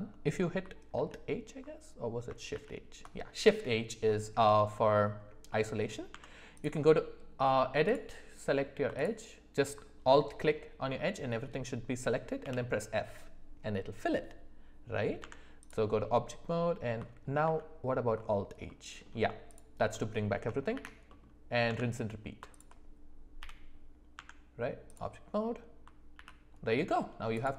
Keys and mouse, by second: 0.9 alt+h, 2.5 alt+h, 4.4 middle click, 5.5 middle click, 6.1 Tab, 12.4 f, 15.2 Tab, 17.4 alt+h, 18.7-19.0 middle drag, 19.9 middle drag, 20.7 shift+h, 21.0 middle click, 21.6 Tab, 22.5 alt+click, 23.4 f, 24.1 Tab, 26.1 alt+h, 26.6 middle click.